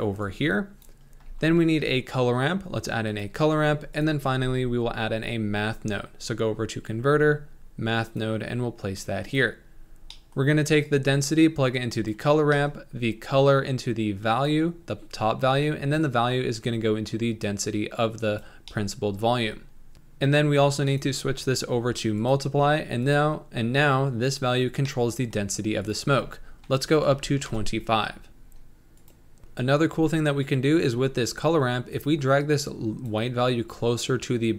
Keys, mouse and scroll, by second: 10.8-12.1 drag, 13.2-14.5 drag, 16.0-17.5 drag, 18.0 click, 18.8-19.9 middle drag, 19.9-25.0 drag, 25.0-26.0 middle drag, 26.0-29.1 drag, 29.4-32.0 middle drag, 32.0-34.5 drag.